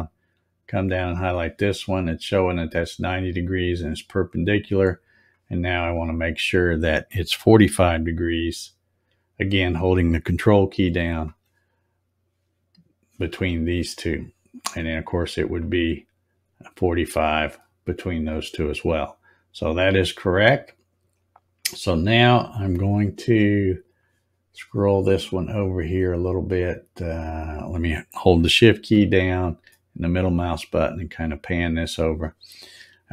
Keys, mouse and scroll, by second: 0.7 ctrl+click, 5.1 click, 6.3 click, 11.1 ctrl+click, 14.1 click, 15.4 click, 17.1 ctrl+click, 19.0 click, 19.7 scroll up 2, 20.6-21.5 scroll up 7, 23.9 click, 29.6 shift+middle click.